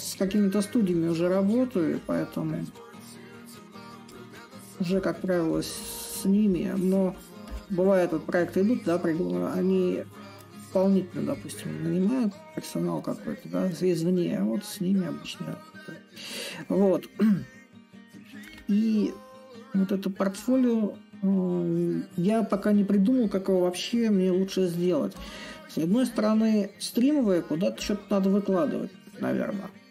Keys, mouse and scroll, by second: 0.0-5.0 drag, 5.2-10.2 drag, 10.6-20.5 drag, 22.2-23.6 drag, 23.6 a, 26.2-29.9 drag.